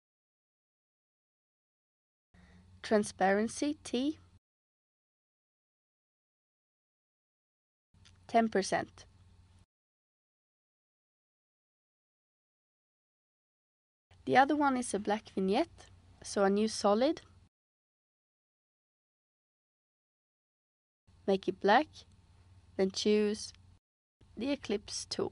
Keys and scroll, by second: 3.8 t, 7.4-8.4 typing, 8.5 Return, 21.3 Return.